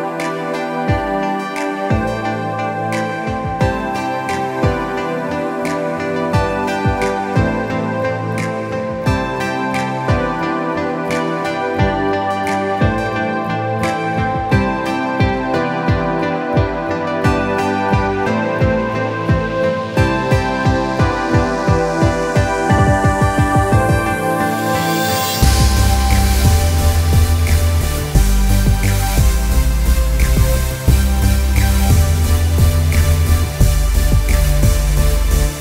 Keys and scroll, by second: 15.0 ctrl+t, 18.7 alt+shift+Return, 24.3 ctrl+KP_Add.